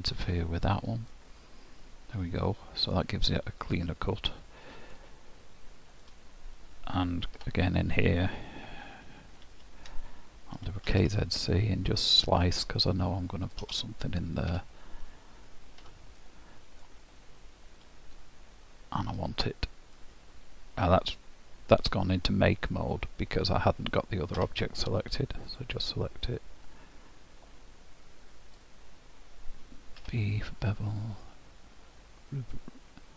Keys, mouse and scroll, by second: 1.2 middle click, 3.3-4.1 scroll up 3, 4.1 middle click, 5.9 click, 7.4 Tab, 9.5 ctrl+KP_3, 10.6 k, 14.1-14.5 scroll down 1, 14.5 Tab, 15.9 h, 16.2 middle click, 16.9 scroll down 1, 17.2 scroll up 2, 19.2 click, 25.5 click, 26.6 click.